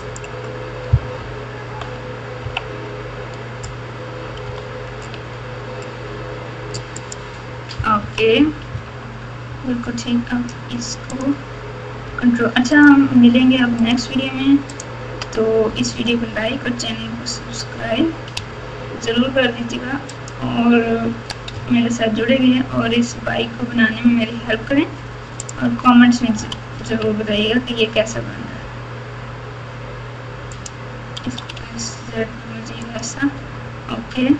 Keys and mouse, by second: 1.1 ctrl+KP_8, 1.6 ctrl+KP_8, 1.9 ctrl+KP_8, 2.4 KP_3, 4.4 g, 6.9-8.7 typing, 11.1 click, 12.7 ctrl+click, 13.8 ctrl+click, 14.7 ctrl+click, 15.9 g, 21.1 s, 26.3 g, 31.2 s, 34.2 g.